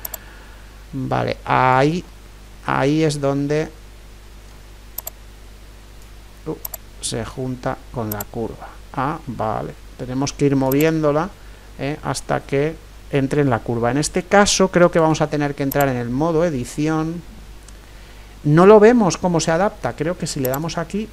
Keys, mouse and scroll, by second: 2.0-7.0 middle drag, 5.0-10.0 drag, 10.7-12.4 drag, 11.2-14.7 middle drag, 14.9 Tab, 20.5-21.1 drag.